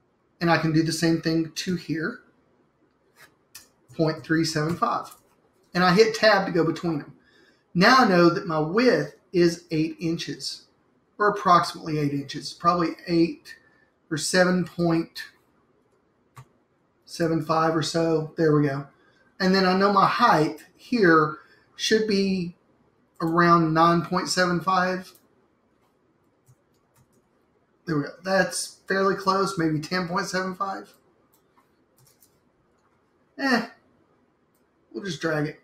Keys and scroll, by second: 1.8 3, 3.7-5.4 typing, 12.0 8, 12.6 Tab, 16.0-17.9 typing, 26.2-27.5 typing, 32.2 0, 32.4 Tab.